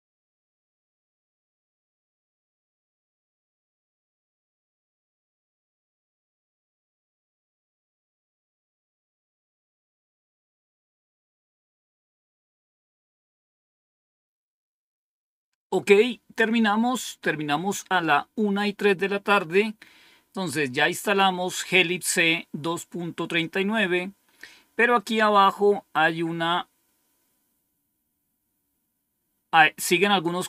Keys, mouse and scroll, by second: 23.4-26.0 scroll down 1, 26.0-27.7 scroll down 1, 27.7-28.4 scroll up 1.